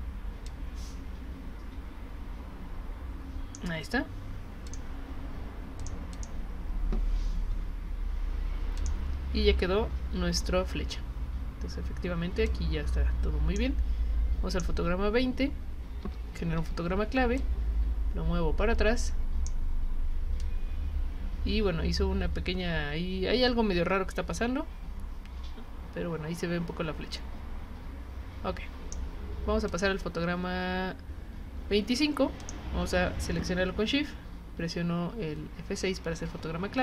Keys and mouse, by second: 0.4-3.5 drag, 4.7 click, 5.8 click, 6.1 click, 8.8 click, 12.5-13.6 drag, 14.5 click, 16.0 F6, 17.4-19.4 drag, 20.4-28.9 drag, 29.7 click, 32.4 click.